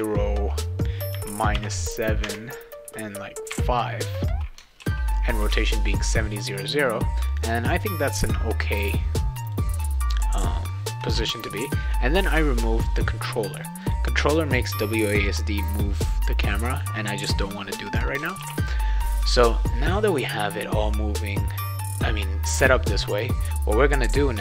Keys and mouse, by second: 2.2 Tab, 4.8 ctrl+s, 7.3 click, 9.4 click, 13.5 click, 13.8 click, 18.4 ctrl+s.